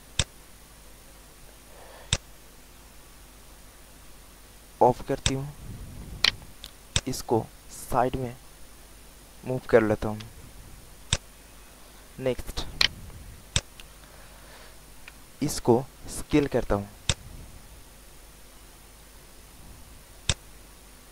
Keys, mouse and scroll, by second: 0.1-3.5 drag, 3.9 alt+middle click, 5.1 click, 5.7 alt+middle click, 6.8 click, 8.5 click, 10.2 w, 11.0 click, 12.2 alt+middle click, 12.8 alt+right click, 13.5 click, 16.4 r, 16.9-19.7 drag.